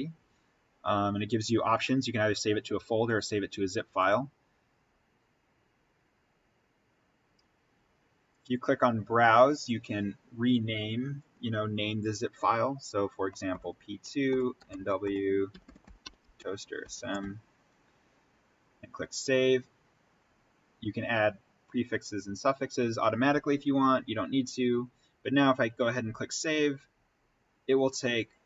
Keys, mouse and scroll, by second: 14.3-17.0 typing, 18.7 click, 25.8 click.